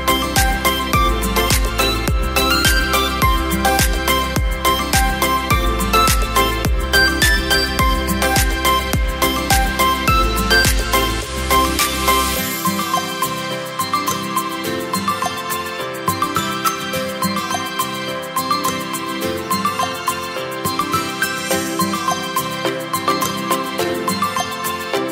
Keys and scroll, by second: 0.9 space, 7.0 typing, 17.9-19.1 typing, 23.8 space.